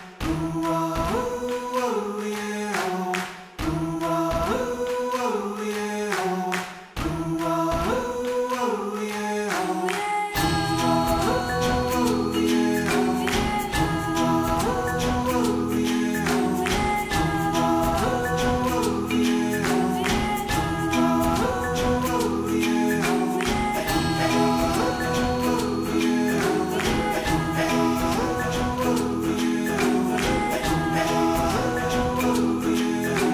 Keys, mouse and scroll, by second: 0.0 Tab, 0.0 scroll down 2, 0.3 scroll up 1, 0.7 shift+middle click, 0.8 Tab, 1.7 click, 2.0 g, 2.5 g, 3.3 click, 3.5 g, 5.7 Tab, 6.0 Tab, 6.2 click, 6.4 g, 7.7 Tab, 8.0 ctrl+s, 9.0 alt+z, 9.2 ctrl+s, 10.0 click, 10.4-10.9 middle drag, 10.9 scroll up 3, 11.0 Tab, 11.1 middle click, 11.6 alt+click, 12.0 g, 14.7 alt+click, 15.0 g, 15.4 Tab, 15.5-16.0 middle drag, 16.0 KP_1, 16.2 scroll down 4, 16.5 ctrl+s, 16.6-17.4 shift+middle drag, 17.4 shift+a, 18.2 r, 19.5 middle click, 19.7 s, 20.6 KP_1, 20.7 scroll up 2, 21.0 g, 22.1 s, 24.6 click, 25.8-27.8 drag, 27.8 shift+middle click, 28.0-28.5 scroll up 2, 28.5 middle click, 30.0 click, 30.2 middle click, 30.7 KP_1, 31.0 scroll down 2, 31.1 middle click, 31.7 click, 31.8 middle click, 31.9 scroll up 3, 32.2 right click, 32.8 KP_1, 33.0 scroll down 5, 33.2 shift+middle click.